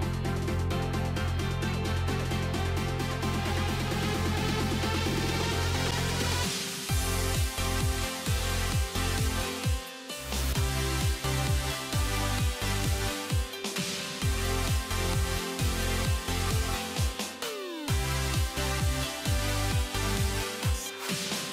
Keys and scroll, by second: 15.8 alt+x.